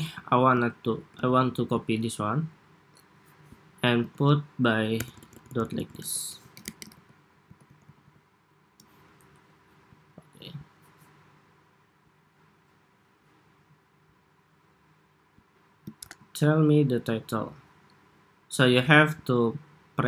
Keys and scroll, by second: 0.6 super+d, 3.8 super+a, 5.7 super+a, 6.3 super+c, 6.7 super+v, 7.3 super+v, 7.7 super+v, 9.2 Escape, 15.7 super+-.